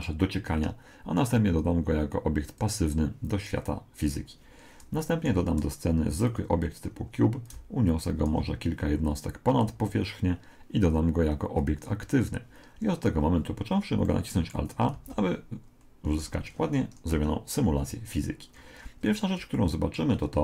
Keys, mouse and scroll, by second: 2.5 click, 5.3 shift+a, 7.5 click, 11.6 click, 14.1-15.9 middle drag, 14.9 alt+a, 16.1 Escape, 17.1 KP_1, 18.5-20.4 middle drag.